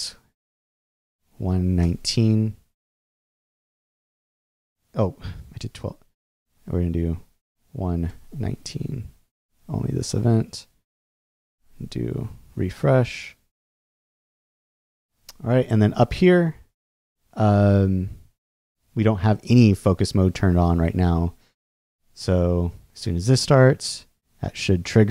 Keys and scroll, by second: 0.5 9, 1.8 Return, 7.5 |, 8.1 Return, 11.3 shift+super+r, 12.1 super+r.